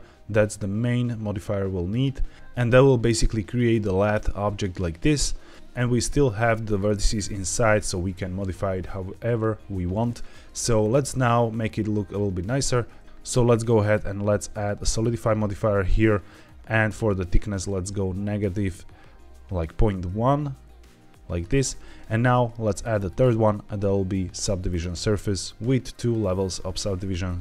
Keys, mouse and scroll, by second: 5.5 Escape, 5.5 Tab, 6.0 Tab, 6.6 click, 7.1 g, 8.0 Escape, 10.7 click, 13.0 ctrl+z, 13.7-14.9 drag, 16.4-21.4 shift+drag, 22.6 click, 23.0-24.7 drag, 25.9 click, 27.2-27.4 middle drag.